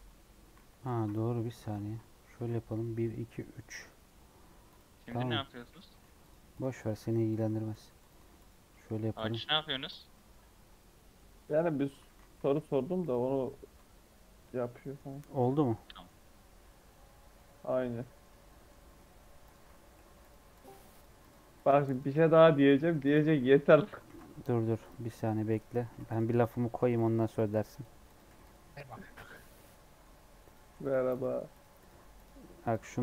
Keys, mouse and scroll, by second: 0.5 ctrl+z, 0.8 ctrl+z, 1.2 middle click, 1.7 ctrl+z, 2.3 ctrl+r, 4.6 click, 5.3 middle click, 6.0 g, 6.5 click, 6.7 g, 7.2 click, 7.4 g, 7.9 click, 8.1 g, 9.1 click, 9.5 g, 10.1 middle click, 10.3 Tab, 10.4 scroll down 2, 10.6-11.7 middle drag, 11.7 Tab, 12.0 middle click, 12.3 a, 12.7 m, 13.4 Tab, 13.6-15.6 middle drag, 15.6-17.1 scroll up 2, 15.7 middle click, 17.1 scroll down 3, 17.3 middle click, 18.2 Tab, 18.4 middle click, 18.7 scroll up 3, 19.4 click, 19.9-22.9 typing, 20.5 click, 21.1 click, 21.8 click, 22.6 click, 23.4 shift+scroll down 1, 23.4 shift+middle click, 24.0 ctrl+r, 25.4 click, 25.8-29.1 typing, 26.3 click, 27.3 click, 28.0 click, 28.8 click, 29.5 middle click, 30.4 click, 30.6-33.0 typing, 31.0 click, 31.7 click, 32.6 click.